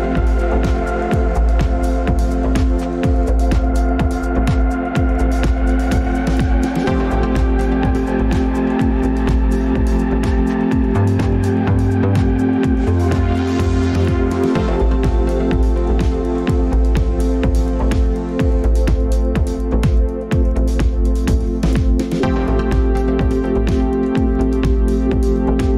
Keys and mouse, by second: 0.0-0.7 middle drag, 2.7-3.4 middle drag, 6.9 g, 8.4-8.9 middle drag, 9.7 middle click, 19.7 g, 21.5 s, 25.2-25.7 shift+middle drag.